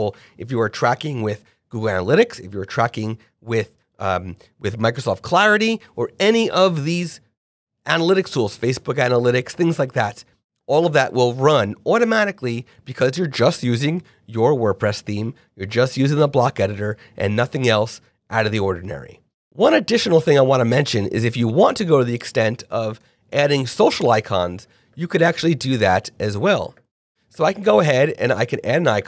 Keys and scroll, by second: 22.2 Return, 22.6 /, 24.0 Return.